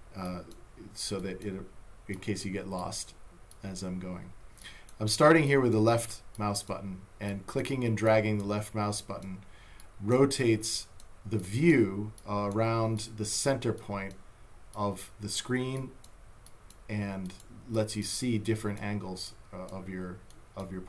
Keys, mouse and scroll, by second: 4.6 click, 19.0 click.